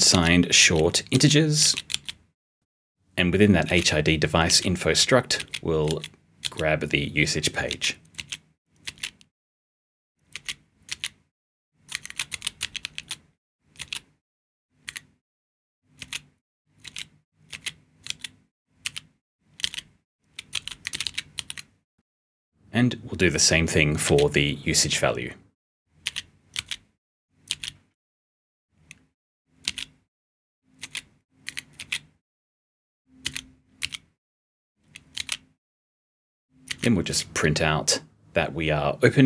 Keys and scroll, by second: 0.0 s, 11.8 *, 14.7 *, 20.8 *, 21.3 *, 23.7-24.5 typing, 25.7-27.9 typing, 29.3-33.7 typing, 34.9-37.5 typing.